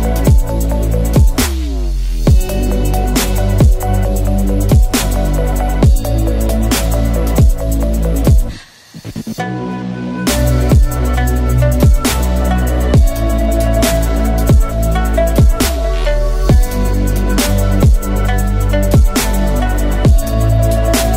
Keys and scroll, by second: 3.0 Delete, 5.9 ctrl+z, 9.2 Tab, 11.7 ctrl+z, 14.8 Delete, 18.4 Tab, 20.6 ctrl+z.